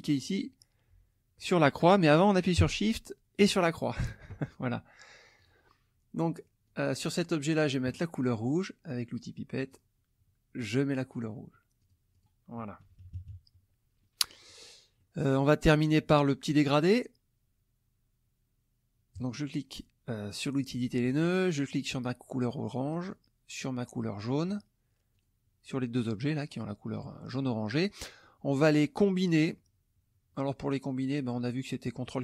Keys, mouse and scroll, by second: 3.4 shift+click, 5.4 click, 6.6 click, 9.6 click, 10.6 click, 11.8 click, 12.8 -, 14.0 click, 15.0 middle click, 19.1 click, 21.2 click, 23.0 shift+click, 25.1 shift+click, 27.7 middle click.